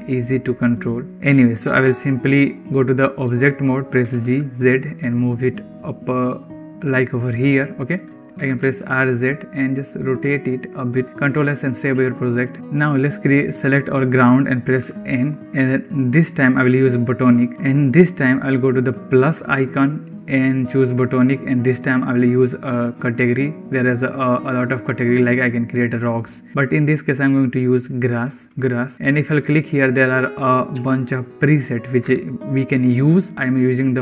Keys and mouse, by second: 0.2-0.6 drag, 2.6-3.0 drag, 3.9 g, 8.2 r, 11.0 ctrl+s, 14.7 n, 16.1 click, 16.7 click, 19.6-34.0 drag.